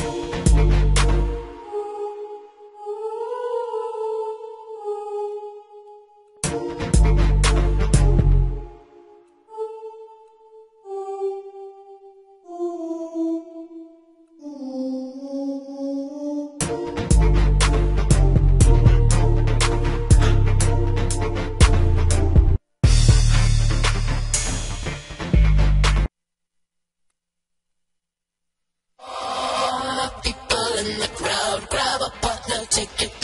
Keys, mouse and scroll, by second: 20.7 F1, 22.0 click, 27.7 right click.